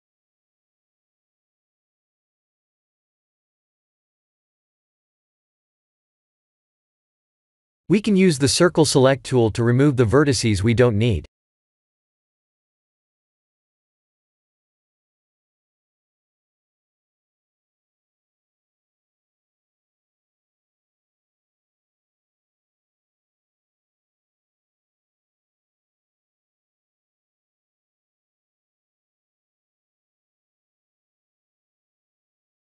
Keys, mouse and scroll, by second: 0.7 scroll up 1, 1.9 click, 1.9 scroll up 2, 2.8 shift+middle click, 3.3 shift+middle click, 7.3 click, 7.9 click, 9.1 Tab, 9.6 1, 10.2 click, 11.3 c.